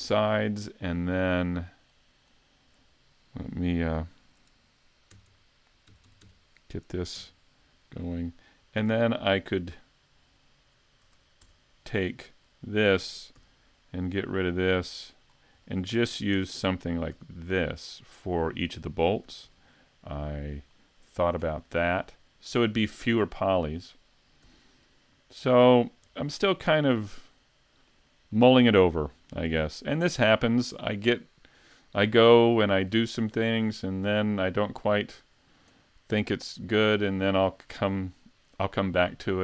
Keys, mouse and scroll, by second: 1.9 click, 7.2 KP_Decimal, 7.8 scroll down 3, 8.3 middle click, 11.4 Tab, 12.0 middle click, 12.5 right click, 13.4 x, 15.3 scroll down 3, 15.6 middle click, 16.3 Tab, 17.1 s, 18.2 click, 19.3 s, 20.7 middle click, 21.7-22.3 scroll down 2, 22.1 middle click, 23.2 middle click, 24.5 x, 25.4-25.8 scroll up 1, 25.8-26.2 scroll down 2, 26.2 shift+middle click, 26.7 scroll up 2, 27.1 middle click, 28.3 shift+middle click, 29.6 super+s.